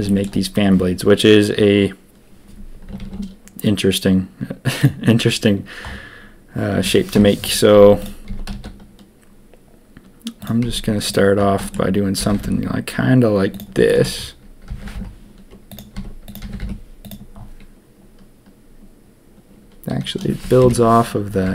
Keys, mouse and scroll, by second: 0.0 shift+click, 3.0 shift+a, 7.1-8.2 typing, 10.6 s, 12.1 g, 14.6 g, 15.9 s, 16.4 g, 20.6 ctrl+KP_3.